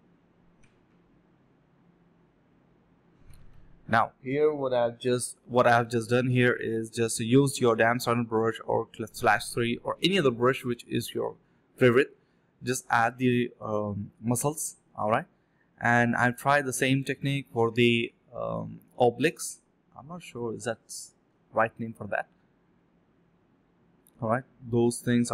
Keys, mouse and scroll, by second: 0.4 alt+double click, 0.7 alt+click, 1.3 ctrl+b, 1.7-4.1 typing, 4.5 double click, 4.9 shift+click, 5.8 typing, 6.2 alt+click, 6.4 alt+click, 6.8 alt+click, 7.0 alt+click, 7.3 alt+click, 9.3 double click, 10.3 shift+click, 10.4 shift+double click, 10.5 shift+click, 11.3 double click, 17.0 double click, 18.4 ctrl+z, 18.7 double click, 19.6 alt+click, 19.8 alt+click, 20.0 alt+double click, 20.2 alt+double click, 20.4 alt+click, 21.3 ctrl+b, 21.4 double click, 21.7 ctrl+b, 22.7-23.2 typing, 24.3 alt+click, 24.7 typing.